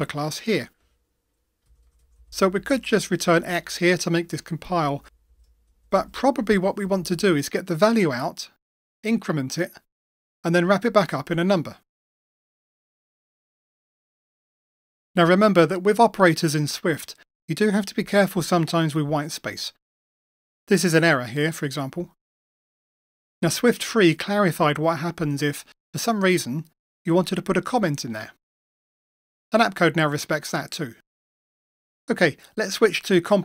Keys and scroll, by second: 3.3 Escape, 10.3 alt+Up, 11.1 alt+super+j, 14.0 Escape.